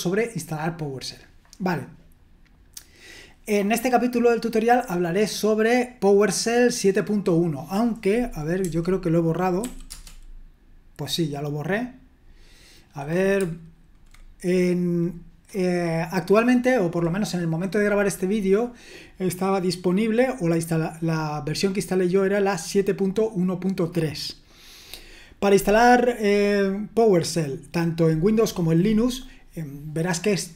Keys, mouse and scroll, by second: 1.5-2.3 scroll down 1, 2.3-3.2 scroll down 1, 3.2-7.4 scroll down 1, 7.4-8.6 scroll down 1, 8.6 typing, 9.6 typing, 9.9 Return, 26.6-30.1 scroll down 1, 30.1-30.5 scroll down 1.